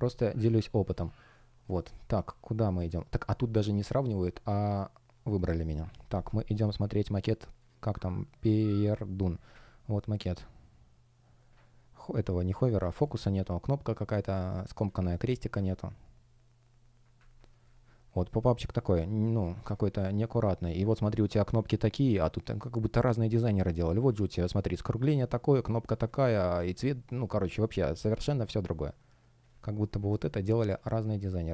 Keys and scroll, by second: 17.3 space, 19.4 space.